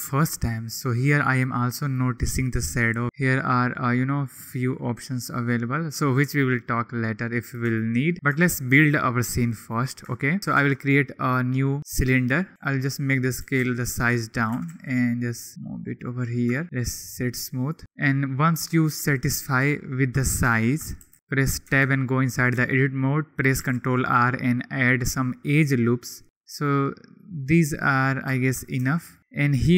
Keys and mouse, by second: 3.0-6.6 middle drag, 7.7 shift+middle click, 8.4 shift+middle click, 9.2 middle click, 10.8 shift+a, 12.5-15.6 typing, 13.1 click, 14.3 click, 15.2 click, 16.0 drag, 18.9 KP_1, 21.0 g, 21.1 z, 21.6 Tab, 23.6 ctrl+r, 28.8 Tab, 29.3 Tab.